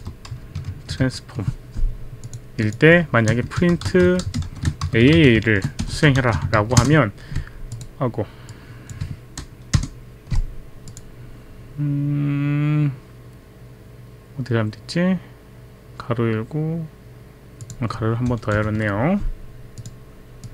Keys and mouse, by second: 0.0 BackSpace, 0.9 ctrl+v, 2.3 click, 2.6 click, 3.3 Return, 3.3-6.9 typing, 6.5 ctrl+a, 6.8 ctrl+Return, 6.9 ctrl+Return, 6.9 ctrl+a, 7.7 click, 8.5 click, 9.7 ctrl+Return, 10.9 click, 17.6 click, 18.6 Delete, 19.8 click, 20.4 click.